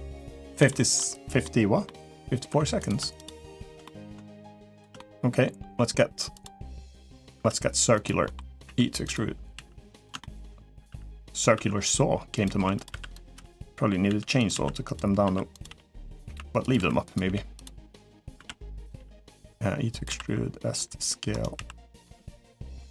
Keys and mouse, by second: 0.0 middle click, 0.4 shift+middle click, 1.2 middle click, 2.2 3, 2.5 click, 3.6 middle click, 4.5 click, 4.7 middle click, 6.1 click, 6.5 middle click, 7.1 s, 8.0 middle click, 8.4 e, 9.3 s, 9.9 shift+middle click, 10.6 r, 11.3 e, 12.3-17.0 typing, 17.6 middle click, 18.1 r, 18.7 g, 19.3 e, 19.8 s, 21.3 s, 21.8 g, 22.8 middle click.